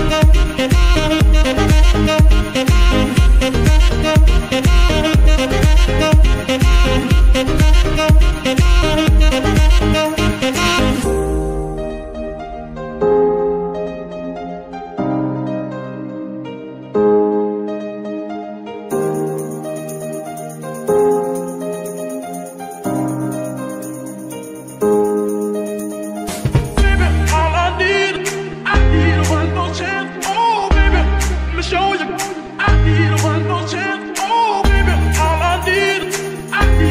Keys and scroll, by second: 0.2 r, 0.4 r, 3.6 g, 8.0 KP_Decimal, 12.0 g, 15.1 r, 18.1 r, 21.9 g, 22.5 r, 22.7 r, 25.1 s, 25.1 g, 26.3 Escape, 28.9 r, 29.8 Escape, 30.4 space, 32.1 r, 33.5 Escape.